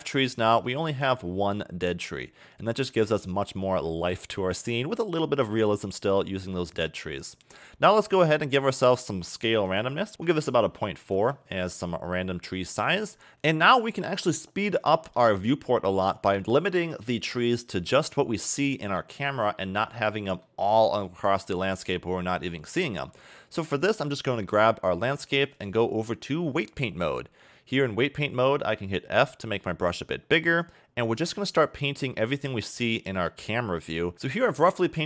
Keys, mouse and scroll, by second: 0.6 a, 0.8 a, 1.2-3.3 scroll up 3, 3.3-4.6 scroll down 2, 4.6-7.1 scroll down 1, 7.1-7.9 scroll up 8, 8.8 click, 13.3 a, 14.3-15.0 scroll down 2, 15.0 shift+middle click, 19.7-20.3 scroll down 4, 20.3 middle click, 20.7-22.6 scroll down 16, 22.6-23.0 scroll up 3, 23.0 KP_0, 23.4-23.7 scroll up 3, 23.7 click, 25.6 click, 29.2 f, 32.2 click.